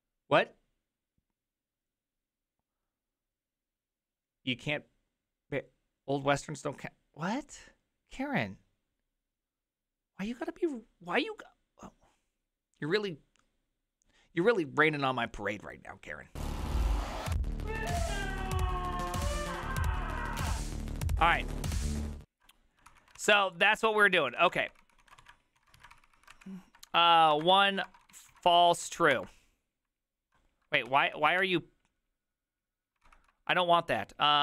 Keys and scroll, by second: 22.2 alt+{, 22.9 ctrl+c, 23.0 ctrl+a, 23.2 [, 23.4 ctrl+u, 23.5 ctrl+u, 23.8 ctrl+u, 24.4 ctrl+u, 24.4 a, 24.7 ctrl+c, 24.8 ctrl+c, 25.1 ctrl+a, 25.2 2, 25.6 ctrl+a, 25.8 3, 26.0 ctrl+c, 26.1 ctrl+a, 26.1 ctrl+c, 26.2 ctrl+c, 26.3 Up, 26.8-29.4 typing, 30.6-31.5 typing, 33.1 ctrl+c.